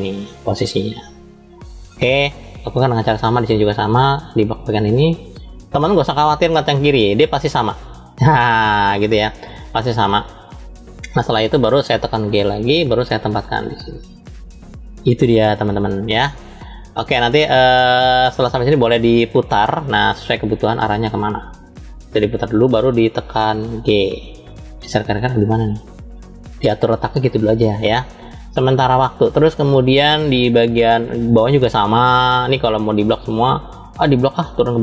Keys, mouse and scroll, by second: 2.3 click, 6.3-10.0 shift+middle drag, 12.4 g, 19.1 click, 20.7-22.5 drag, 23.6 g, 29.9-31.5 shift+middle drag, 32.0-32.4 scroll down 2, 33.3 click.